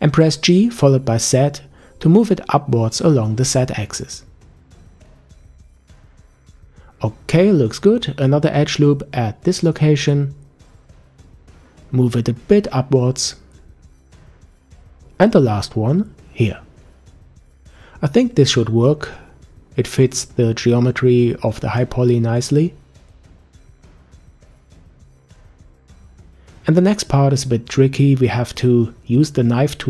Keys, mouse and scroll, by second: 6.6-7.6 scroll up 1, 7.6-8.9 shift+middle drag, 8.9 ctrl+r, 12.4 g, 16.7 ctrl+r, 19.0 g, 28.7-29.4 scroll down 1, 29.4 middle click.